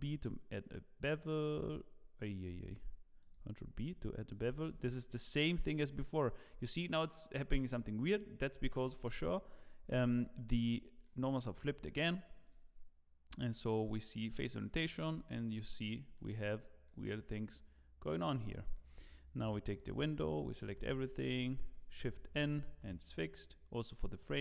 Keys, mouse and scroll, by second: 2.8 2, 3.2 alt+click, 4.7 ctrl+b, 4.7 2, 9.9 Tab, 10.6-12.1 scroll down 7, 11.0 middle click, 12.4 click, 13.8 scroll down 2, 14.1 middle click, 14.9 scroll down 2, 15.2 shift+middle click, 16.4-16.8 scroll down 1, 16.8 middle click, 18.4-18.7 scroll up 2, 18.7 shift+middle click, 19.1 click, 19.8 Tab, 20.8 a, 22.1 shift+n, 22.7 Tab, 23.4 click.